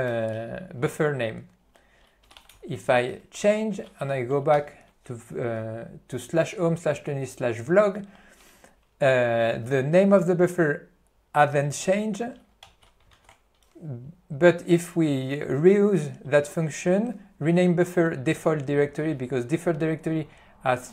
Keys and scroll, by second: 2.3 c, 2.5 d, 12.7 alt+:.